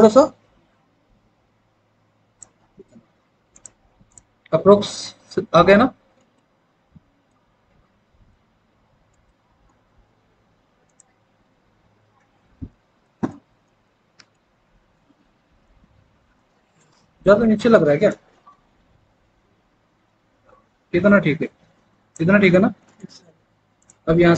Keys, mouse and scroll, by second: 11.2 alt+w, 12.6 alt+w.